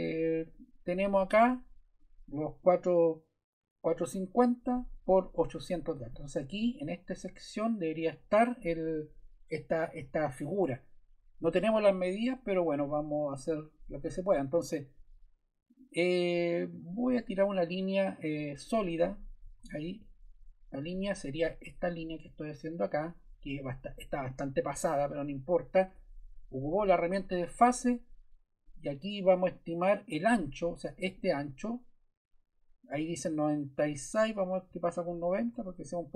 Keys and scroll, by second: 19.4 Escape, 34.7 0, 35.4 Return.